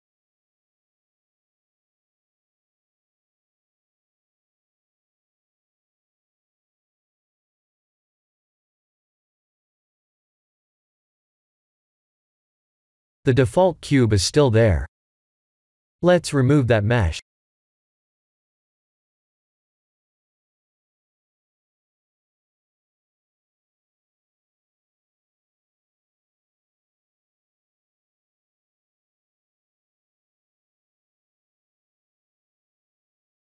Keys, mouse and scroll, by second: 14.5 click, 17.2 click, 19.7-21.9 scroll up 14, 21.9-22.7 scroll down 9, 24.0 click, 25.2 x, 27.1 click.